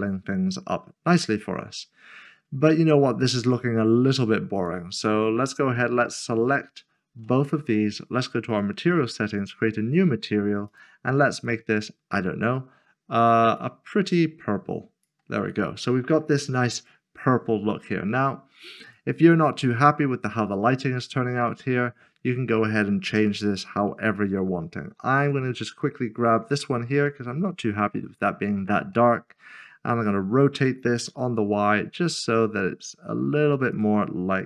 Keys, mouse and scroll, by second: 0.2-1.8 scroll down 1, 3.0 scroll up 1, 4.5 click, 6.0 shift+click, 9.7 click, 17.5-18.7 scroll down 1, 18.7 scroll down 1, 19.2 click, 20.0-20.5 scroll down 1, 20.5 middle click, 25.2 0, 25.3 click, 25.8 middle click, 26.6 scroll down 1, 33.7 click.